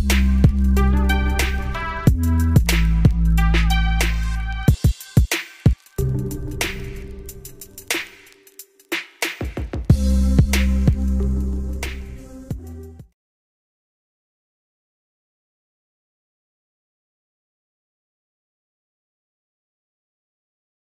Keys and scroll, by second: 7.3 ctrl+space, 7.7 ctrl+F1.